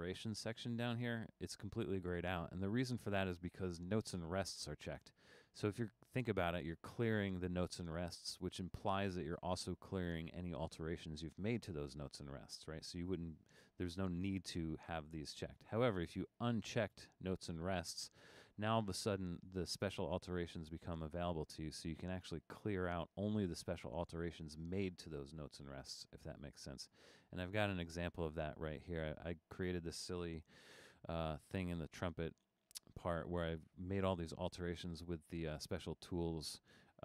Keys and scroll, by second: 30.7 super+=.